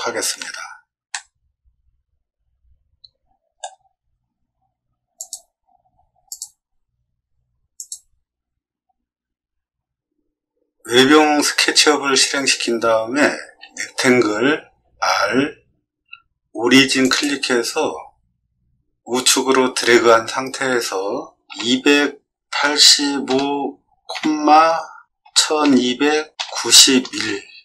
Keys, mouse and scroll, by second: 1.1-3.5 shift+middle drag, 5.1 click, 6.2 click, 7.7 click, 14.6 r, 17.0 click, 21.4 2, 22.6 8, 23.2 5, 24.1 ,, 25.2 1, 25.6 2, 26.3 9, 27.0 1.